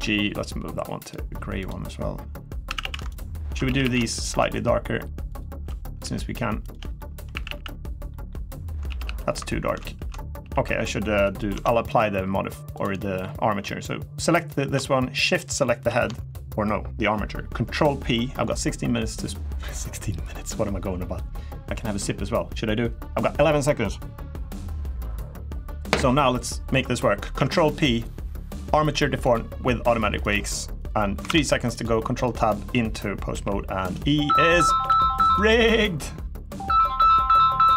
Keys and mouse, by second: 0.8 click, 1.4 click, 2.4 a, 2.6 a, 2.9 alt+shift+click, 4.0 alt+shift+click, 5.1 alt+shift+click, 5.8 g, 6.4 click, 6.7 shift+middle click, 7.1 a, 7.2 a, 7.8 middle click, 8.6 ctrl+z, 8.8 ctrl+z, 10.2 ctrl+z, 10.2 g, 11.0 click, 11.3 Tab, 11.7 drag, 12.6 drag, 12.7 middle drag, 15.0 shift+click, 27.0 ctrl+p, 30.6 click, 31.0 ctrl+Tab, 32.1 click, 33.1 g, 33.6 right drag, 34.6 r, 35.0-35.4 right drag.